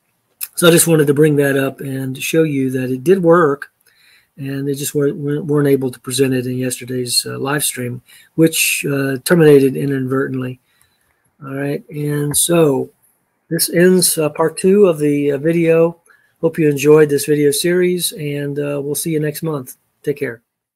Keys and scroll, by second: 11.1 ctrl+a, 12.3 d.